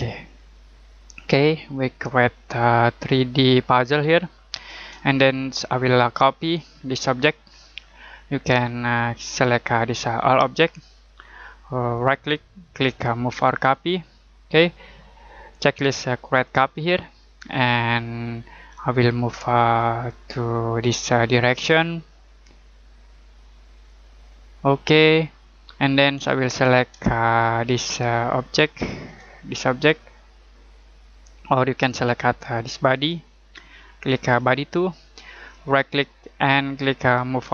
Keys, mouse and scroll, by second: 0.9 shift+middle click, 5.2 middle click, 5.7-6.1 scroll down 1, 6.1-6.7 scroll up 1, 9.4 click, 11.9 right click, 13.6 click, 16.7 click, 19.9 click, 25.7 middle click, 27.1 middle click, 29.8 click, 35.5 right click.